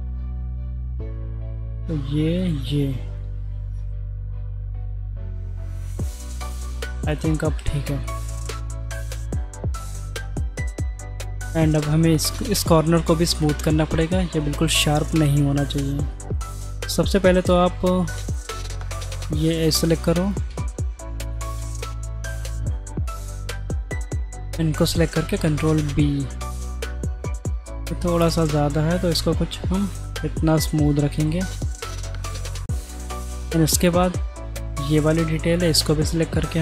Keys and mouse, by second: 0.4 alt+shift+click, 1.4 ctrl+z, 2.4 shift+click, 4.5 g, 7.1 middle click, 8.0-9.0 middle drag, 10.1 3, 10.5 middle click, 14.2 middle click, 15.3 middle click, 16.1 middle click, 16.8 alt+click, 17.8 2, 18.3 alt+click, 18.6 middle click, 19.4 middle click, 20.3 alt+shift+click, 20.6 middle click, 21.3 alt+shift+click, 21.6 middle click, 22.4 alt+shift+click, 22.6 middle click, 23.6 ctrl+z, 25.1 ctrl+b, 31.7-32.8 middle drag, 35.1 alt+click.